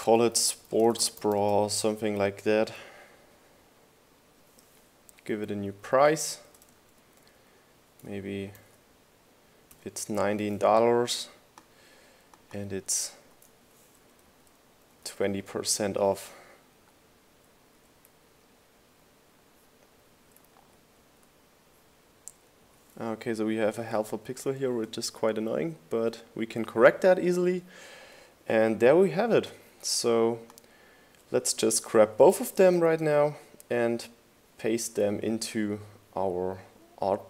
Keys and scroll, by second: 1.0-3.1 typing, 6.3 Right, 6.8 Left, 7.7 BackSpace, 9.8-11.7 typing, 14.5 Left, 15.4 Left, 15.6-17.0 typing, 19.1 Right, 20.3 Left, 20.8 Left, 21.6 Right, 22.4 Left, 25.0-25.8 typing, 26.1 Return, 33.8 super+c.